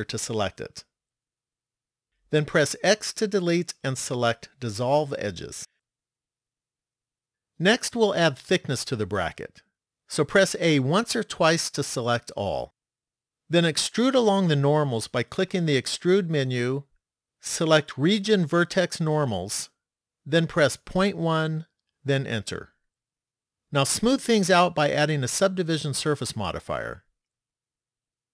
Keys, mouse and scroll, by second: 2.8 x, 7.9 middle click, 10.7 a, 16.1 click, 25.3 click.